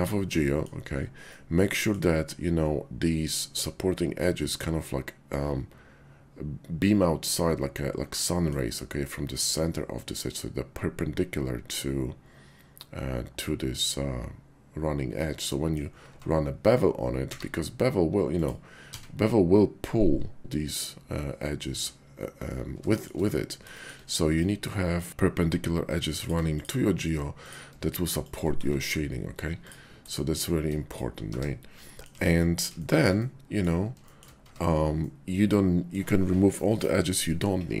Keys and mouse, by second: 0.4 middle click, 1.3 click, 1.4 middle click, 8.1 middle click, 15.5 middle click, 16.1 Tab, 17.1 q, 18.9 z, 22.8 shift+click, 23.7 shift+drag, 24.3 middle click, 25.1 Tab, 26.1 click, 26.5 shift+click, 27.3 click, 28.2 shift+click, 28.6 1, 29.6 click, 30.1 click, 31.3 1, 31.9 click, 32.1 Tab, 32.9 shift+click, 33.2 click, 34.4 Tab, 35.0 click.